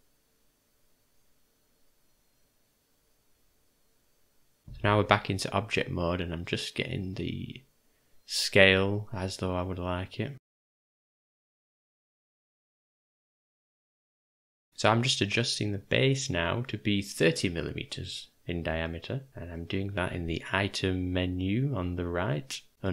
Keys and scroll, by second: 4.6 g, 4.6 s, 5.9 u, 11.2 n.